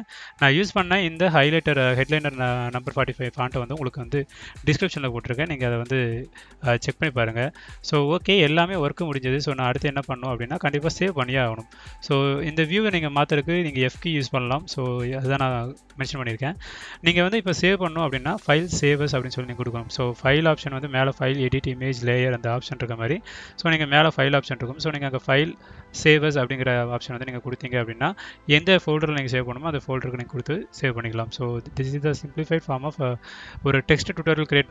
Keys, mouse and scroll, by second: 1.0 drag, 2.5 click, 4.1 click, 7.9 middle click, 7.9-8.6 scroll up 1, 9.6 click, 11.6 d, 12.9 d, 14.0 f, 15.6-16.1 scroll down 1, 19.1 scroll down 2, 20.3 click, 23.3 ctrl+shift+s, 24.5 click, 24.9 r, 25.3 space, 32.8 click, 34.3 click.